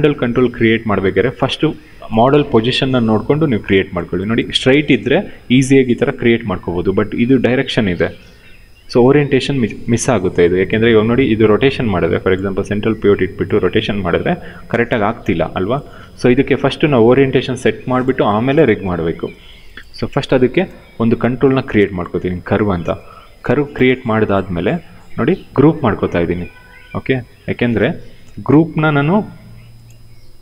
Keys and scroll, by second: 10.4 e, 15.8 ctrl+z, 16.3 w, 27.3 ctrl+g.